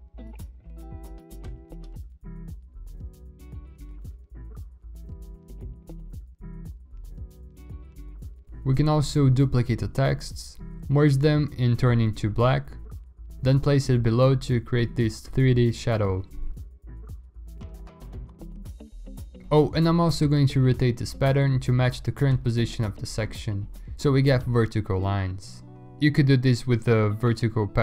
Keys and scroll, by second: 0.7 ctrl+u, 1.5 Escape, 1.9 ctrl+l, 7.2 v, 7.4 v, 7.8 v, 9.4 ctrl+e, 10.4 Tab, 10.6 shift+Left, 12.1 ctrl+i, 13.4 2, 15.8 5, 16.6 3, 18.7 ctrl+j, 19.3 ctrl+e, 19.8 ctrl+t, 23.5 ctrl+alt+z, 25.0 ctrl+alt+z, 25.2 alt+BackSpace, 25.8 ctrl+d, 26.2 alt+BackSpace, 27.0 ctrl+t, 27.3 Escape.